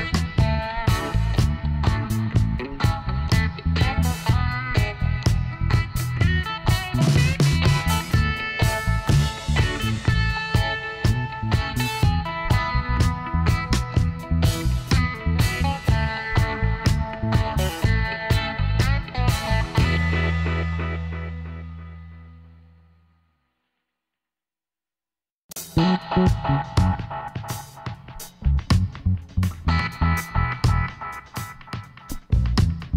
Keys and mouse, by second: 3.0-9.1 drag, 4.3-9.6 right drag, 9.6 ctrl+r, 13.8-15.6 drag, 14.3 z, 15.6 z, 18.0 click, 18.9 middle click, 19.8-22.2 right drag, 22.2-25.5 middle drag, 25.5 z, 26.8 b, 31.5-32.9 middle drag.